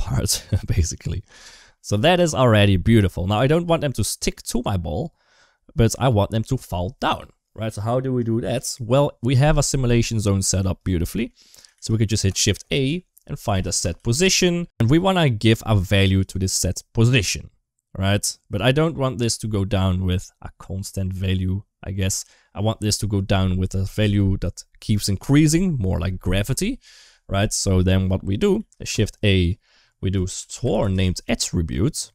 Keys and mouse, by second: 1.7 middle click, 3.2 space, 3.5 space, 5.6 click, 6.9 click, 7.1 click, 8.0 click, 8.2-9.2 drag, 9.6 middle click, 10.2 click, 10.4 g, 10.9 middle click, 11.6 shift+a, 15.0 click, 16.0 click, 18.3 click, 28.4 shift+a.